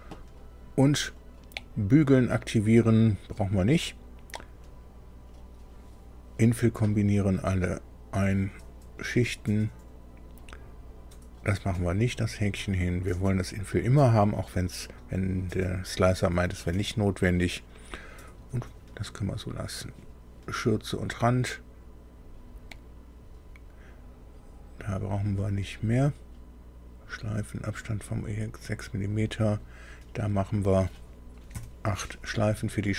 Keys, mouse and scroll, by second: 19.9 click, 29.6 click, 31.5 KP_8.